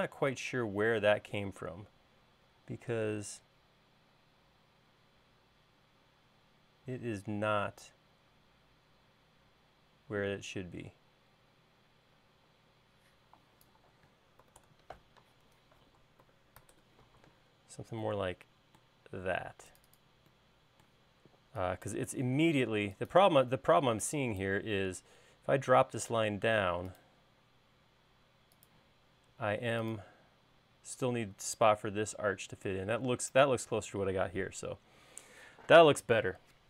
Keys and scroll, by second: 0.0 p, 15.0 8, 15.1 Return, 16.6-17.7 typing, 21.7 e, 24.5 e, 25.8 l.